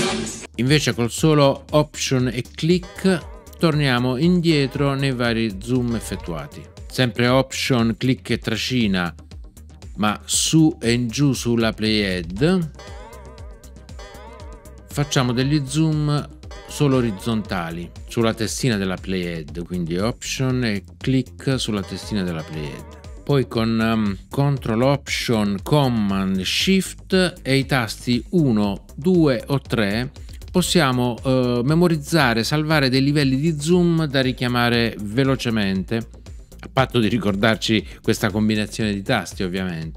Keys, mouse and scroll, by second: 2.8 alt+click, 12.7 alt+click, 21.8 alt+click.